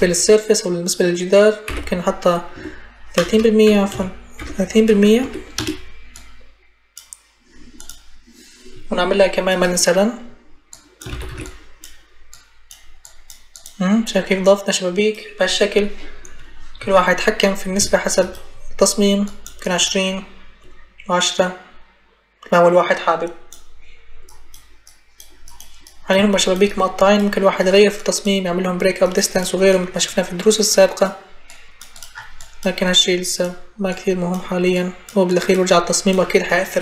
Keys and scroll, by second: 1.5 ., 2.4 3, 3.0 BackSpace, 3.8 Caps_Lock, 4.2 ., 5.1 3, 5.4 Return, 10.9 ctrl+c, 11.1 ctrl+v.